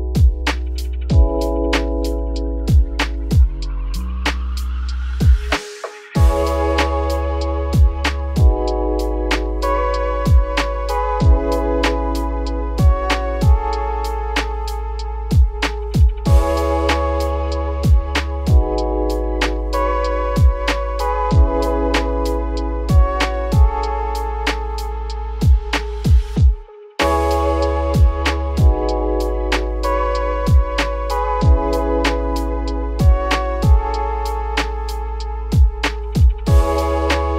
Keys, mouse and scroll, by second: 0.2 click, 0.6 z, 1.1 click, 1.4 z, 1.9-2.5 scroll up 5, 2.5 g, 4.5 `, 5.3 middle click, 5.9 z, 6.4 middle click, 6.9 z, 7.6 g, 9.3 middle click, 9.8 click, 10.2 alt+click, 11.1 s, 14.3 Tab, 14.5 scroll down 2, 14.6 middle drag, 14.9 `, 15.2 z, 15.6-16.0 scroll up 3, 16.0 g, 17.0 Tab, 17.5 a, 18.3 scroll up 1, 18.5 scroll down 4, 18.8 z, 19.2 click, 20.1 scroll up 4, 20.5 g, 22.1 z, 22.3-22.7 scroll down 6, 22.7 `, 23.4 Tab, 23.6-24.2 scroll down 4, 24.2 ctrl+s, 24.6-25.3 scroll down 3, 25.3-25.8 scroll up 5, 25.4 Tab, 25.8 z, 26.3 click, 26.7 z, 27.0 g, 30.8 click, 34.8-35.4 scroll up 1, 35.4-37.3 scroll up 2.